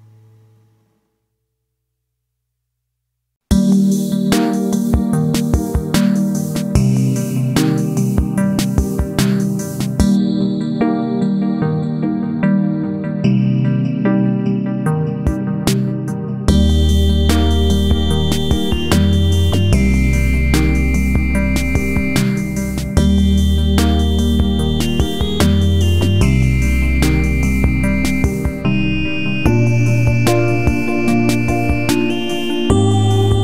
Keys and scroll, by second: 4.7 Delete, 6.6 ctrl+a, 9.7 Left.